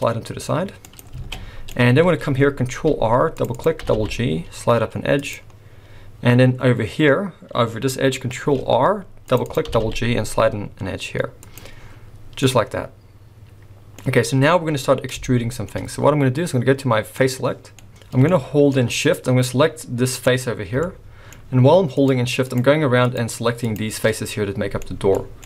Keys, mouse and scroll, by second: 1.2 alt+a, 1.3 middle click, 2.7 ctrl+r, 3.8 g, 8.4 ctrl+r, 9.7 g, 11.8-12.4 scroll down 4, 12.4 middle click, 15.2 shift+middle click, 17.2 click, 17.8 middle click, 17.9 scroll up 3, 18.0 scroll down 1, 18.3 shift+middle click, 18.9 scroll up 1, 20.2 click, 20.8 shift+scroll up 1, 20.9 shift+middle click, 22.0 shift+click, 22.5 click, 23.0 shift+click, 23.6 shift+click, 24.8 shift+middle click, 25.2 scroll down 2, 25.4 middle click.